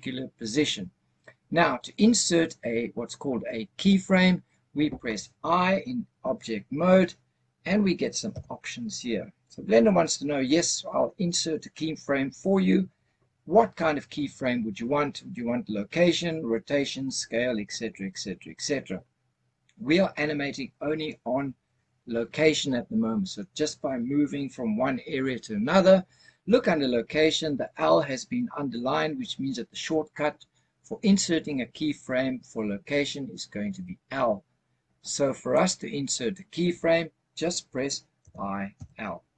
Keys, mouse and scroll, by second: 8.2 i, 38.1 i.